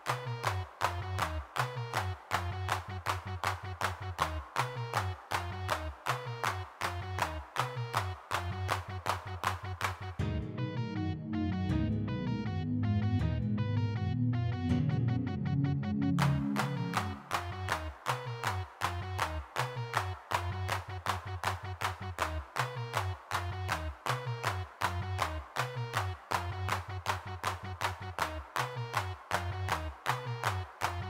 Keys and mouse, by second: 0.2 middle click, 1.2 shift+c, 1.2 d, 1.5 shift+c, 1.7 f, 3.1-5.7 middle drag, 7.9 3, 8.7-13.5 middle drag, 14.3-17.8 middle drag, 19.1-21.6 drag, 21.6 middle click, 22.4 middle click, 24.7-27.7 middle drag, 28.3 f, 29.8-31.0 middle drag.